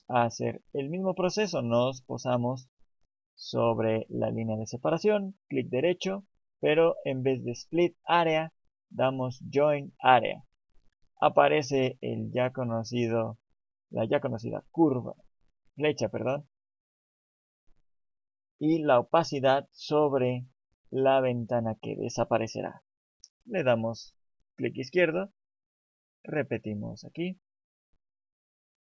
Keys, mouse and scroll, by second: 27.2 right click.